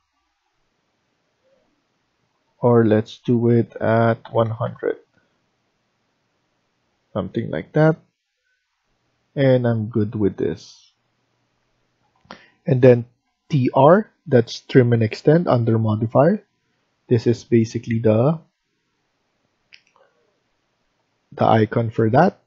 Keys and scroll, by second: 3.9-4.7 typing, 11.5 Escape, 11.8 Escape, 13.2 typing.